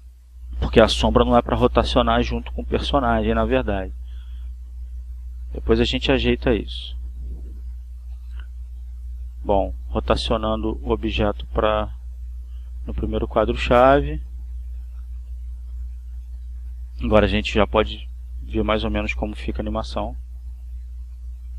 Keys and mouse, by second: 8.5-10.2 drag, 10.9-12.5 drag, 13.5-14.5 drag, 17.1 click, 20.2 click, 21.0 click.